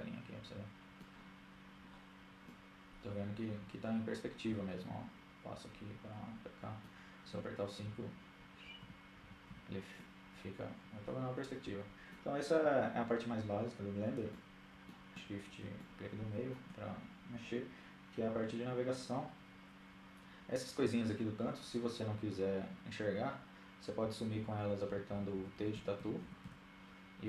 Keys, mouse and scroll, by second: 0.6-2.6 middle drag, 6.0-8.3 typing, 7.2-10.1 middle drag, 13.1-14.4 middle drag, 14.7-15.8 middle drag, 22.8-25.1 typing, 26.3-27.2 typing.